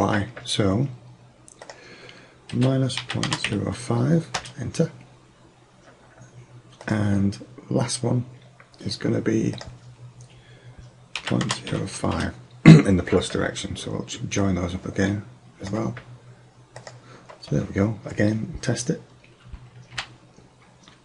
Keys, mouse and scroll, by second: 1.7-3.6 drag, 6.9-8.8 drag, 9.6-11.5 drag, 14.5-16.1 drag, 16.9-18.7 drag, 20.0 p.